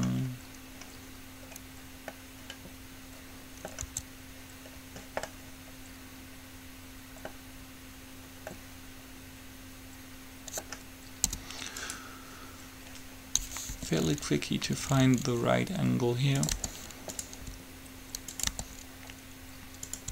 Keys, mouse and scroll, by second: 1.8 middle click, 4.1 Tab, 6.0 middle click, 8.7-10.3 middle drag, 11.5 u, 13.9 r, 16.7 g, 17.6 r, 18.6 g.